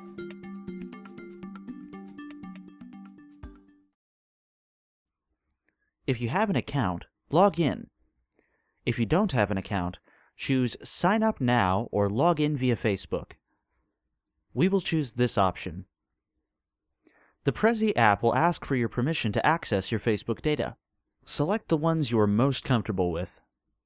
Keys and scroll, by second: 0.0-1.3 typing, 2.5 Return.